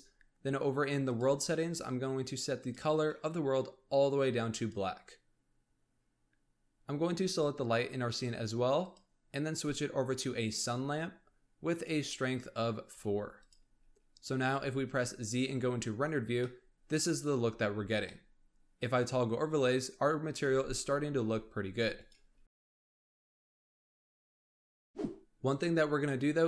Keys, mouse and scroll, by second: 1.0 click, 2.5 click, 7.2 click, 8.7 click, 10.4 click, 11.6-13.5 drag, 14.4 z, 16.0-16.4 scroll down 1, 16.4-17.3 middle drag, 17.3 z, 18.1-21.1 middle drag, 21.2 z, 21.9 click.